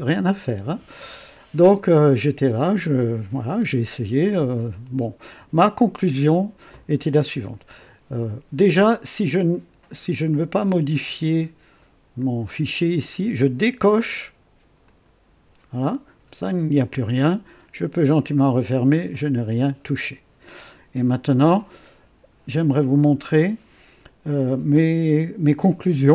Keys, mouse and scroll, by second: 14.8 click, 18.2 click.